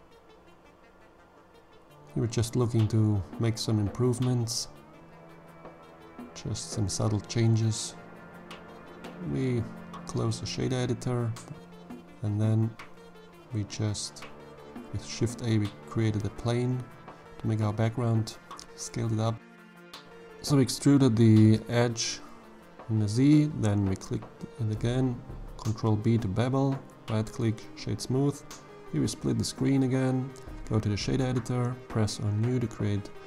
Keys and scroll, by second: 10.6 shift+a, 13.4 Tab, 13.8 s, 14.4 1, 14.6 5, 14.9 Return, 16.8 2, 18.6 e, 19.6 z, 22.5 ctrl+b, 24.6 Tab, 33.0 b, 33.2 g.